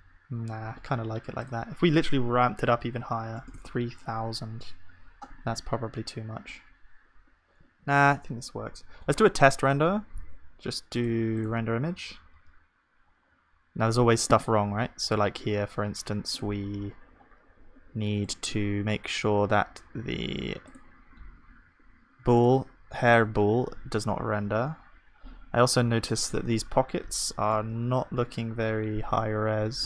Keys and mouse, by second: 2.6 KP_0, 5.5 ctrl+z, 7.7 ctrl+s, 18.3-21.7 drag, 25.6-27.5 middle drag, 27.5-29.8 drag, 27.5-29.8 right drag.